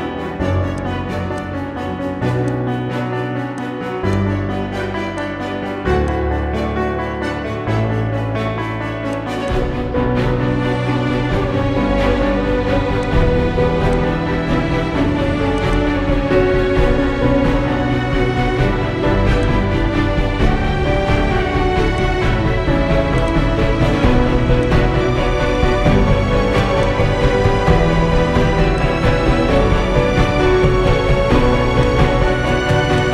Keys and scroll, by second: 17.1 b, 18.0 Return, 31.4 ctrl+z.